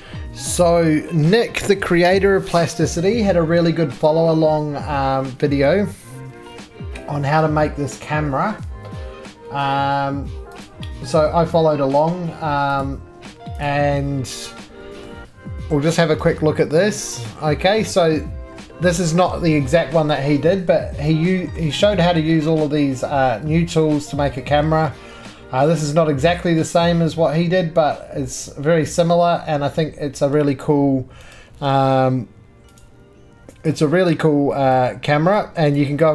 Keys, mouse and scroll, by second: 0.3 scroll, 4.1 click, 10.7 drag, 11.0 click, 11.3-12.8 drag, 13.7 click, 14.4-14.7 scroll, 15.1 middle click, 16.2 right click, 16.3-17.0 scroll down 6, 17.0 click, 17.8 scroll, 19.5 middle click, 20.0 shift+middle click, 20.7 middle click, 20.9 middle click, 21.6 middle click, 22.2 shift+middle click, 22.2 scroll up 1, 23.7 middle click, 23.8-25.8 scroll up 4, 24.4 shift+middle click, 25.8 middle click, 26.0-27.7 scroll up 1, 27.8 scroll down 1, 29.9 scroll, 30.3 middle click, 30.5-31.4 scroll, 31.4 right click, 32.0 scroll, 32.8 click, 33.3-36.1 scroll.